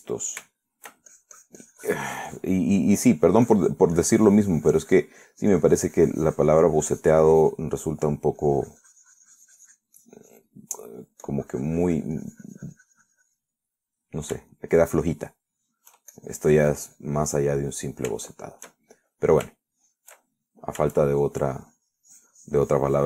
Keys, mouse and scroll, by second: 0.9 shift+middle click, 1.4 shift+middle click, 2.3-3.9 shift+drag, 4.0 shift+middle click, 4.7-6.4 drag, 6.8-9.0 drag, 9.0 middle click, 9.6-11.2 drag, 11.3 click, 11.9 middle click, 12.5-14.8 drag, 14.9 middle click, 15.5 scroll up 1, 15.7 shift+middle click, 16.3-16.6 shift+scroll up 1, 16.6 shift+middle click, 17.2 shift+scroll up 1, 17.4-18.9 shift+drag, 19.0-20.0 drag, 20.1 shift+click, 20.8-22.0 shift+drag, 22.6-23.0 shift+drag.